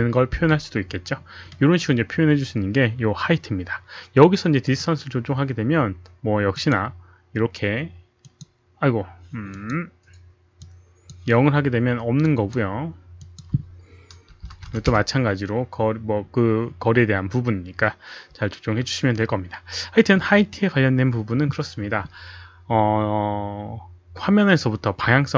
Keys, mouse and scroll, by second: 4.7 click, 6.5 click, 8.3 click, 9.2 click, 10.0 click, 10.6 click, 12.3 click, 13.3 click, 14.6 KP_1, 14.9 Return, 16.7 click, 16.7 KP_0, 21.8 Return, 21.8 click, 21.8 KP_1, 21.8 KP_Decimal, 21.8 KP_0.